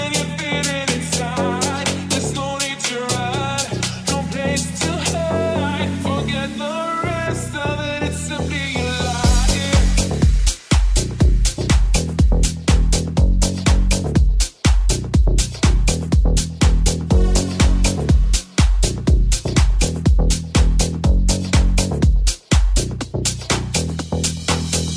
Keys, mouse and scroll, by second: 0.1-2.2 middle drag, 2.2 right click, 2.4-6.6 shift+middle drag, 6.6 right click, 6.7-13.8 shift+middle drag, 9.6 g, 14.1 middle click, 18.4-24.9 middle drag.